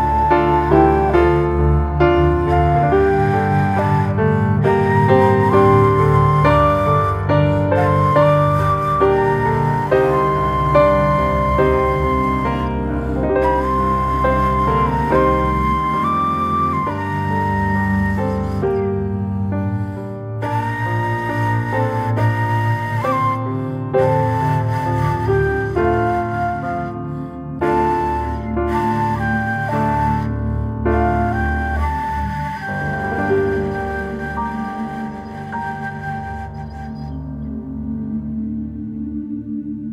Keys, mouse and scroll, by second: 2.2 ctrl+b, 5.7 Tab, 5.9 scroll down 2, 6.2-7.8 middle drag, 7.8 ctrl+2, 8.3-9.4 middle drag, 9.4 scroll down 2, 10.4 alt+middle click, 11.0-11.7 shift+middle drag, 11.7 g, 13.6-14.1 middle drag, 14.7-16.1 middle drag, 16.1 s, 19.1 scroll up 1, 19.4-19.7 middle drag, 19.7 scroll up 1, 20.0 shift+middle drag, 20.3 scroll up 1, 21.0 g, 23.0 scroll down 2, 23.3-23.6 middle drag, 24.0 click, 25.0 drag, 25.6 click, 26.2 s, 29.0-30.6 shift+middle drag, 31.0-31.5 shift+middle drag, 31.5 g, 33.5 click, 34.1 click, 35.5 click, 36.1 g, 37.7 click, 38.2 drag, 38.7 g, 39.8 click.